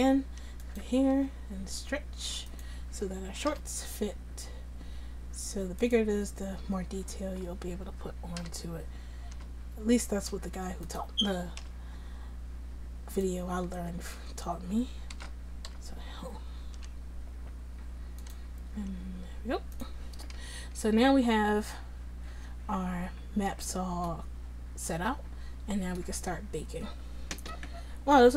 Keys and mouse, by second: 1.2 s, 3.6 g, 6.9 Tab, 7.2 Tab, 8.4 l, 9.4 s, 11.7 g, 13.8 Tab, 14.2 Tab, 15.2 a, 15.7 l, 16.8 g, 18.8 s, 20.4 Tab, 20.8 Tab.